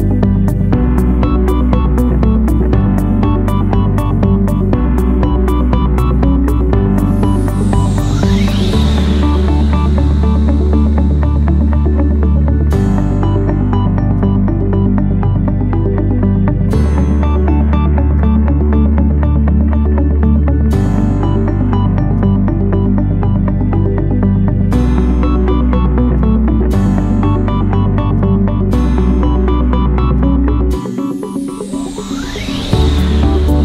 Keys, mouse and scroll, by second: 5.5 click, 6.5 click, 7.5 1, 7.9 0, 8.3 Return, 26.8 3, 27.5 7, 27.9 ., 28.6 5, 29.1 Return.